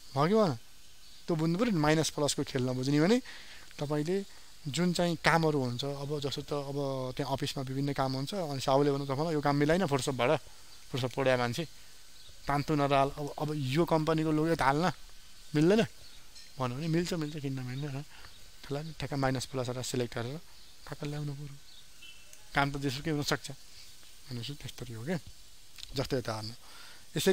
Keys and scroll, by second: 0.9 ctrl+0.